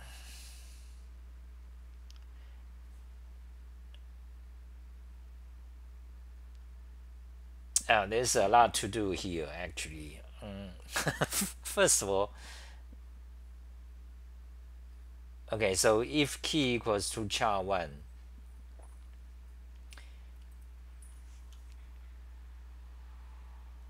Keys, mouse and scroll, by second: 16.7 ctrl+g, 16.7 typing, 21.1 t, 21.4 t, 21.5 t.